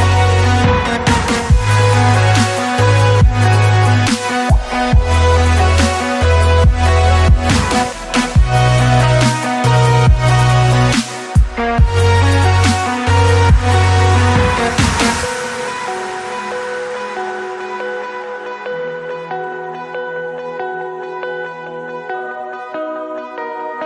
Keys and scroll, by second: 1.1 Up, 1.3 scroll down 1, 1.5 scroll up 1, 3.5 Escape, 4.3 c, 7.9 ctrl+shift+z, 9.0 shift+Escape, 11.5 Escape, 14.5-18.5 typing, 15.6 ctrl+z, 19.9-21.6 typing, 23.7 s.